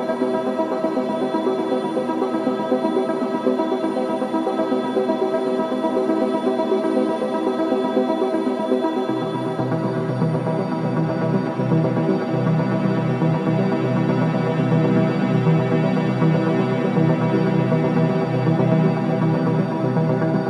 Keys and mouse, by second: 0.0-0.1 typing, 2.0 click, 2.7-3.4 typing, 3.1 click, 4.8-6.8 typing, 5.1-6.1 drag, 11.2-13.5 drag, 14.3 click, 16.8 shift+click, 18.7 click, 19.0 click.